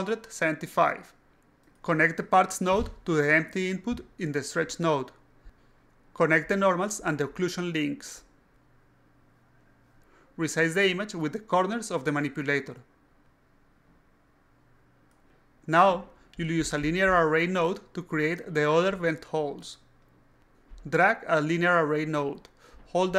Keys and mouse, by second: 2.9-4.1 drag, 5.4 click, 6.6 click, 7.8 click, 10.0-11.6 shift+drag, 11.9-12.4 drag, 12.9-14.2 shift+drag, 14.6-15.6 drag, 16.2-17.2 alt+drag, 17.6-18.3 shift+drag, 18.6-19.4 shift+drag, 20.0 alt+click, 21.3 click, 22.3-23.1 ctrl+drag.